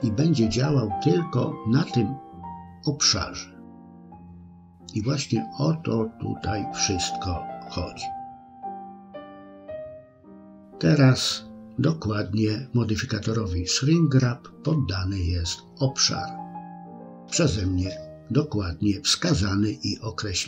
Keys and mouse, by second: 16.0 middle click, 17.7 KP_1.